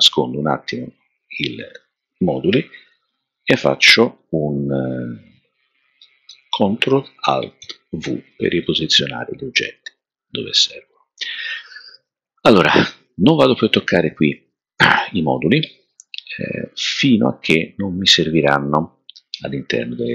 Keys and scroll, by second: 7.6 alt+super+v.